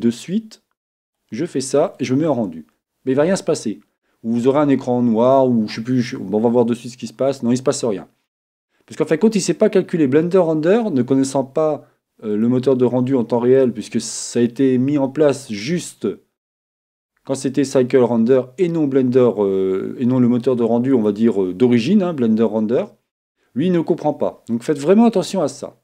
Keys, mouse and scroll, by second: 1.0-2.9 drag, 12.4-14.2 drag, 15.5-17.5 drag, 21.0-22.9 drag.